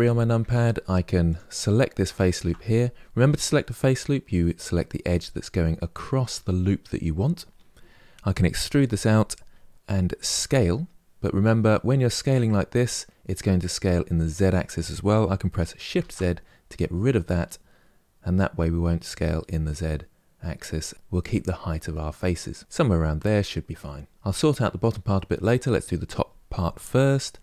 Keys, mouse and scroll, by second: 1.0 alt+click, 8.4 e, 22.6-27.3 middle drag, 27.3 2.